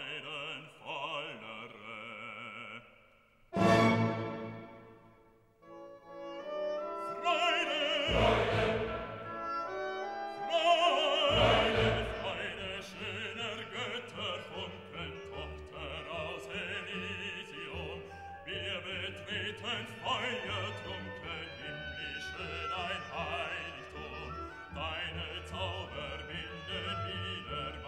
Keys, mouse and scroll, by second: 2.0 click, 3.7 scroll down 1, 5.9 click, 11.8 scroll down 1, 13.3 click, 16.2 click, 22.3-27.8 drag.